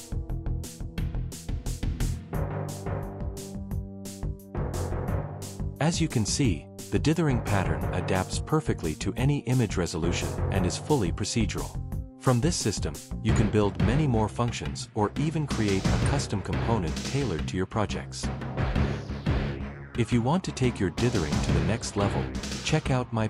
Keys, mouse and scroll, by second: 8.3 click, 9.0 middle click, 9.5-10.6 middle drag, 10.6 click, 13.1 click, 14.7 middle click, 16.7 click.